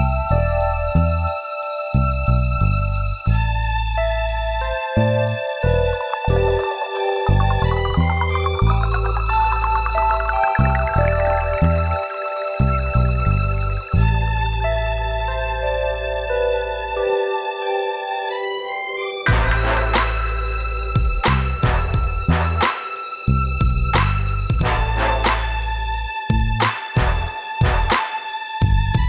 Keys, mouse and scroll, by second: 0.7 click, 6.6 middle click, 7.9 click, 9.5 click, 9.6 click, 11.0 click, 11.3 click, 11.5 click, 12.5 Delete, 12.5 ,, 13.3 click, 13.4 click, 14.1 scroll up 1, 16.2 click.